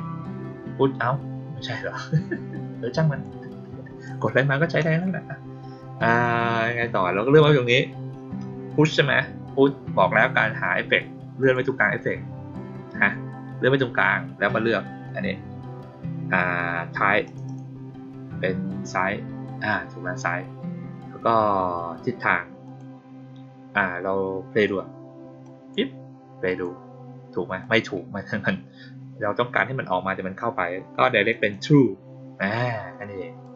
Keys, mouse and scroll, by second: 3.1-4.0 drag, 6.0 click, 11.3 click, 17.2 click, 17.4 click, 22.6 click, 25.3 drag, 26.4 click, 27.5 click, 31.2 click, 31.4 click, 33.4 drag.